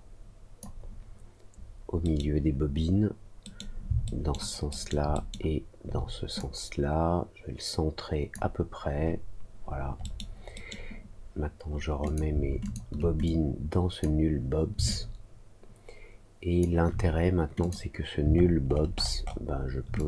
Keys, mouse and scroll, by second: 2.0 middle click, 3.4 middle click, 4.0 alt+middle click, 4.6 alt+middle click, 5.1 alt+middle click, 6.3-8.3 drag, 9.9 middle click, 10.5 middle click, 12.0 click, 12.6 shift+click, 13.2 click, 14.8-16.5 alt+drag, 17.5 click, 18.3 alt+middle click, 18.6 alt+middle click, 19.1 alt+middle click, 19.9-20.0 drag.